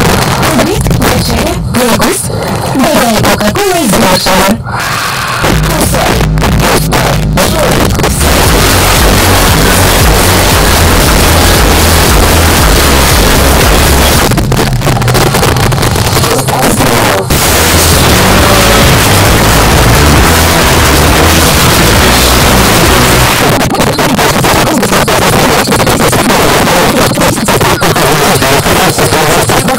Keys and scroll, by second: 0.0 Down, 0.1 Down, 0.3 Down, 0.4 Down, 0.6 Down, 0.7 Down, 0.9 Down, 1.1 Down, 1.2 Down, 1.4 Down, 1.6 Down, 1.8 Down, 2.0 Down, 2.1 Down, 2.3 Down, 2.5 Down, 2.6 Down, 2.8 Down, 3.4 Down, 3.9 Return, 14.2 Page_Down, 23.3 Page_Down.